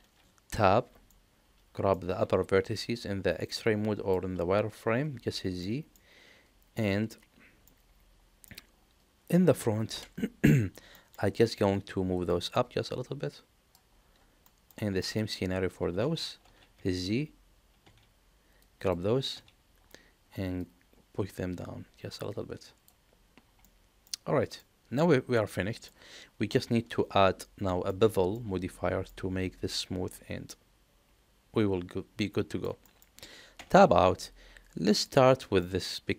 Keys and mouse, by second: 0.4 Tab, 1.0 middle click, 2.4 alt+z, 3.5 click, 4.8 alt+z, 5.6 middle click, 7.6 middle click, 9.9 KP_1, 10.9 shift+middle click, 12.5-13.7 drag, 14.4 shift+middle click, 15.0 shift+middle click, 16.0 alt+z, 16.4 alt+z, 17.8 z, 18.7 click, 19.3 z, 20.6-22.8 drag, 23.6 middle click, 24.5-25.8 middle drag, 27.8 shift+middle click, 28.3 middle click, 30.4-32.6 middle drag, 32.8 shift+middle click, 33.5 Tab, 34.9 click, 35.6-36.1 middle drag.